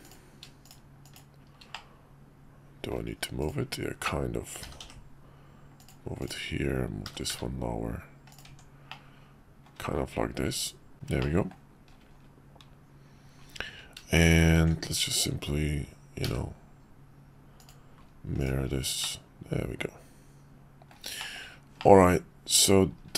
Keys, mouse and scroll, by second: 0.0 click, 1.7-2.9 middle drag, 3.4 click, 4.6 g, 7.0 g, 8.5 Tab, 8.9-9.6 middle drag, 10.6 /, 11.2 middle drag, 14.6 alt+x, 17.6 click, 18.4 click, 19.0-20.9 middle drag, 21.2 shift+middle click, 21.8 middle click.